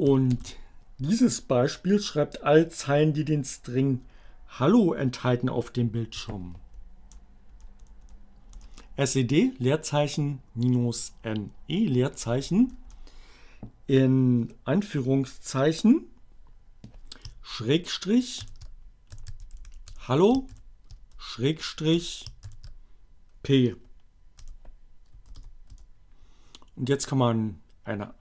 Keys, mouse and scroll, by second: 0.4 ctrl+c, 5.8 Up, 6.4 BackSpace, 11.0 BackSpace, 18.4-22.2 typing, 23.8 p, 25.8 shift+Return.